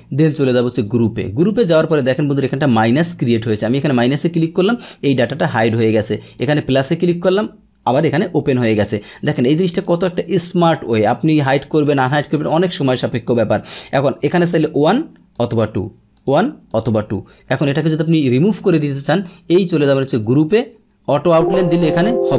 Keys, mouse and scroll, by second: 0.7 click, 3.7 click, 4.3 click, 6.4 click, 9.3 click, 9.8 click, 14.6 click, 15.3 click, 16.1 click, 16.7 click, 19.9 click, 21.1 click.